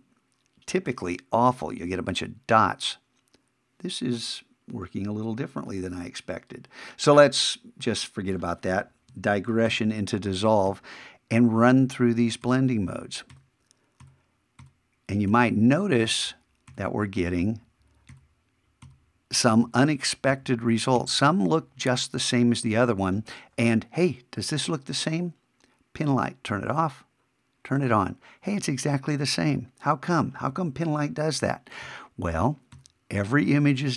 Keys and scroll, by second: 9.7 shift+=, 31.8 shift+=.